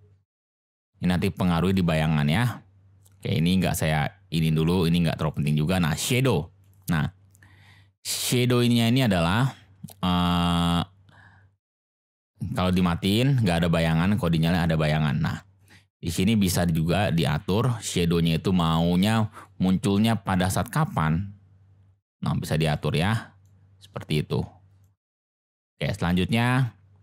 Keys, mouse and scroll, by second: 0.5-1.7 drag, 3.6 click, 5.2 click, 6.6 click, 11.8 click, 13.7 click, 16.4 click, 19.5-22.8 drag, 23.5-25.0 drag.